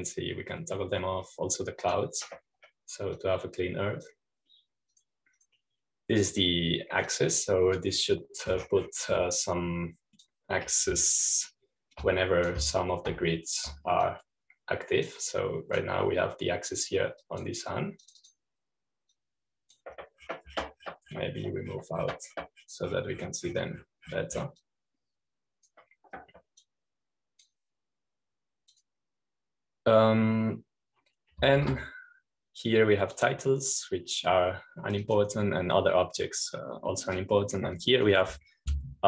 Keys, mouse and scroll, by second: 1.0 click, 3.8 click, 5.1-6.6 drag, 6.8 click, 8.2-10.4 drag, 10.4 middle click, 11.2-12.8 drag, 13.9-15.1 drag, 15.1 shift+q, 16.0-18.5 drag, 19.1 click, 19.9 click, 21.0-22.5 drag, 26.5-28.1 drag, 28.5-30.1 drag, 30.6 click, 33.5 shift+q, 35.1 click, 36.9 click.